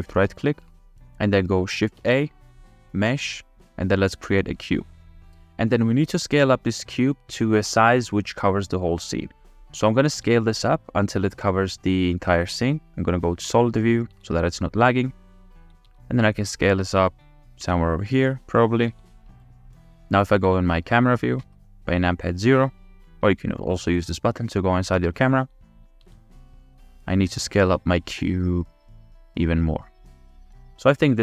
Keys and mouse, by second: 2.0 shift+a, 6.1 click, 8.7-9.5 drag, 10.6 s, 14.2 ctrl+s, 15.9 s, 16.6 click, 17.6 s, 18.9 s, 21.4 KP_0, 25.0 click, 26.0 s.